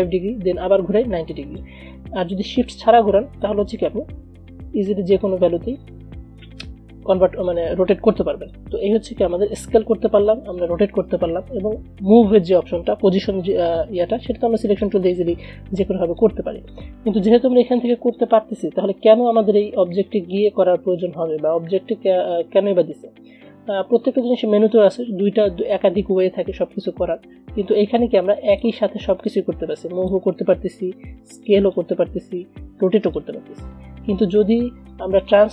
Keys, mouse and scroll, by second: 3.6-9.7 drag, 9.7 ctrl+z, 14.4-20.5 drag, 28.6 click, 28.7-34.2 drag, 34.2 ctrl+z, 35.1 click.